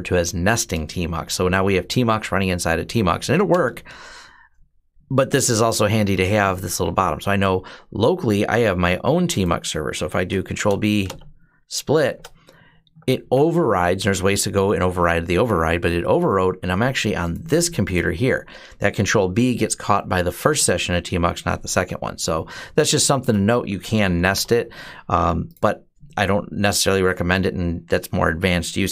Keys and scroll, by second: 3.3 Return, 10.3 ctrl+b, 10.8 ", 21.5 typing, 23.3-24.5 typing, 28.7-28.9 typing.